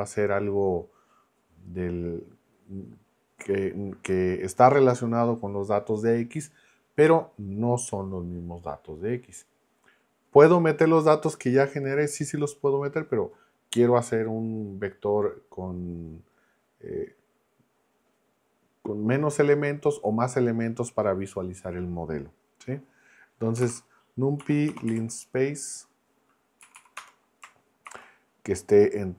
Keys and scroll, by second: 23.3-25.4 typing, 26.6 Down, 27.0 Return, 27.8 shift+9.